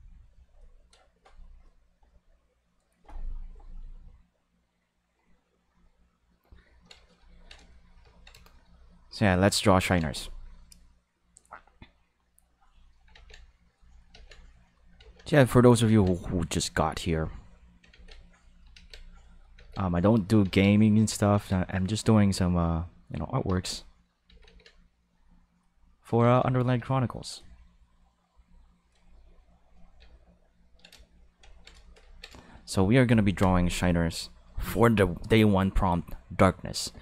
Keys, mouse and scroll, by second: 9.1 click, 9.8 ctrl+z, 12.5 click, 13.6 click, 14.3 click, 15.2 click, 17.2 click, 18.2 click, 19.1 click, 19.8 click, 20.4 ctrl+z, 20.6 click, 21.6 click, 22.5 click, 23.0 click, 23.9 click, 25.0 click, 25.5 click, 26.4 ctrl+z, 30.1 ctrl+middle click, 31.1 shift+middle click, 31.5 ctrl+middle click, 31.8 shift+middle click, 32.0 ctrl+middle click, 32.3-33.4 shift+middle drag.